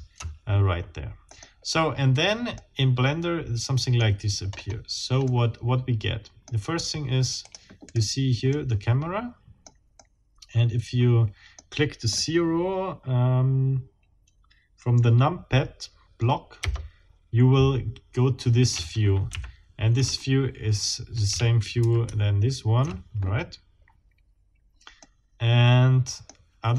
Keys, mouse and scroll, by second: 0.0 Down, 1.3 middle click, 2.2 scroll down 2, 2.5-4.2 middle drag, 4.5-4.9 scroll up 2, 5.3-6.6 middle drag, 7.4 click, 7.9 right click, 8.5-9.8 drag, 10.0-11.7 drag, 16.6 KP_0, 22.3 ctrl+alt+Down, 24.1-24.5 scroll down 2, 25.0-26.2 middle drag, 26.2-26.5 scroll down 2.